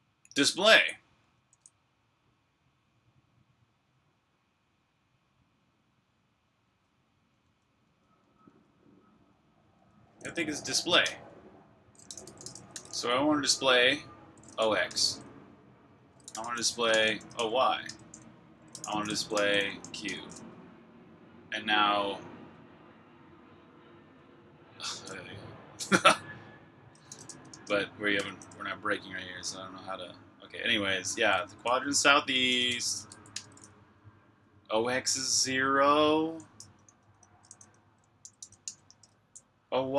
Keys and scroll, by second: 1.2 k, 7.4-9.6 typing, 11.0-13.2 typing, 14.2-14.9 typing, 16.0-20.2 typing, 27.0-28.1 typing, 32.1-33.5 typing, 36.8-38.8 typing, 38.9 Return.